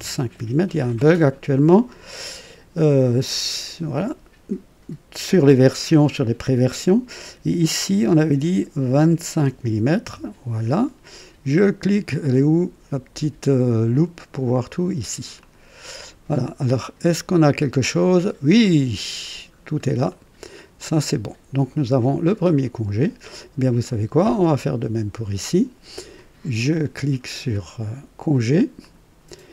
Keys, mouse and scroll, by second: 1.5 click, 8.9 alt+KP_2, 9.4 alt+KP_5, 10.0 Return, 15.3 click, 16.6-18.5 drag, 18.6 click, 19.5-19.8 scroll up 2, 20.1 right click, 20.7-22.7 drag, 24.4 click, 28.8 click.